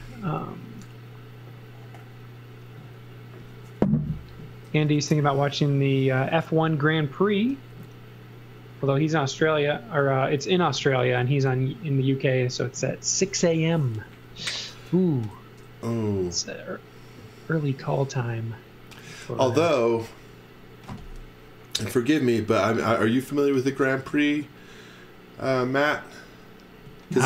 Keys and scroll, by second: 10.8 x, 11.2 v, 26.9 z.